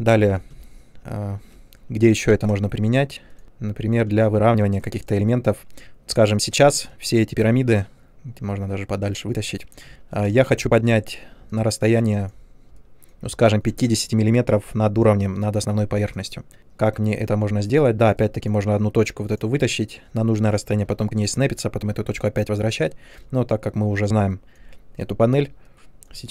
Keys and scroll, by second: 0.5-1.9 typing, 3.4 w, 4.0 space, 8.4 w, 12.0 space.